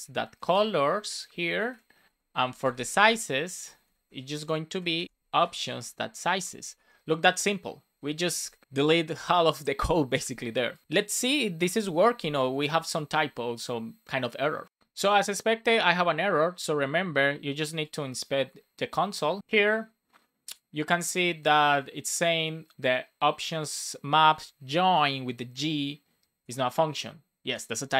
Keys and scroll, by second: 0.5 Return, 1.7 Escape, 2.0 Right, 2.4 alt+shift+Left, 3.3 alt+shift+Right, 4.2 super+c, 4.3 Down, 4.7 Left, 4.8 super+v, 5.4 BackSpace, 6.4 Return, 6.6 super+s, 11.6 BackSpace, 11.8 super+s.